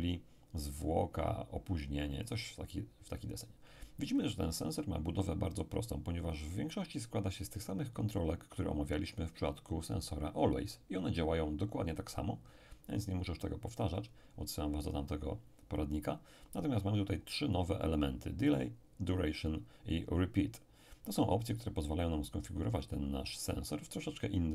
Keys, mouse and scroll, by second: 2.3 click.